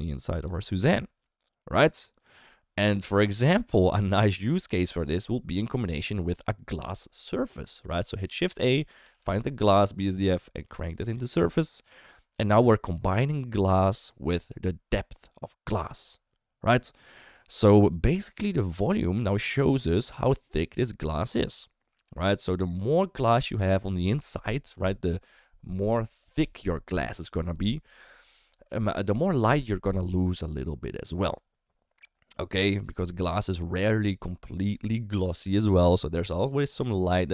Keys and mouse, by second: 0.7-2.9 middle drag, 4.1 click, 4.6-5.7 drag, 8.2 shift+a, 9.1 s, 10.6 click, 18.5-22.5 drag.